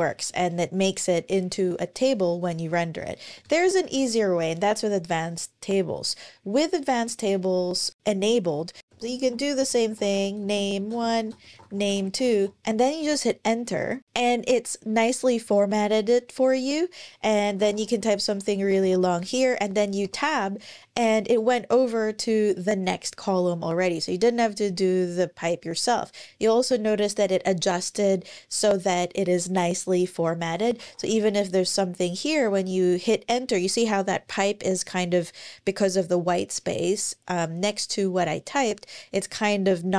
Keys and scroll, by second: 3.1 Return, 3.2 Return, 3.6 Up, 8.3-12.8 typing, 12.8 Return, 17.0-19.8 typing, 18.6 Tab, 30.6-30.9 typing.